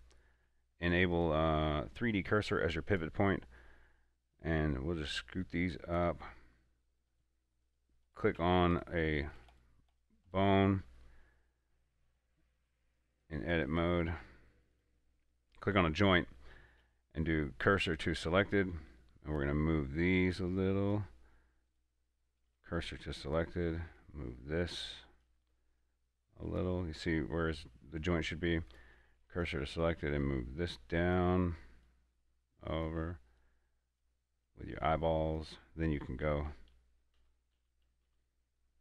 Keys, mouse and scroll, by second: 0.2 shift+middle click, 0.7-7.4 drag, 7.4 right click, 8.0 right click, 8.7 Tab, 9.0 right click, 9.7 Tab, 9.8 right click, 10.6 right click, 12.9 click, 15.0 right click, 17.1 shift+s, 18.3-22.0 drag, 22.0 right click, 22.8 shift+s, 23.4-29.0 drag, 29.0 right click, 29.3 shift+s, 29.6-38.0 drag.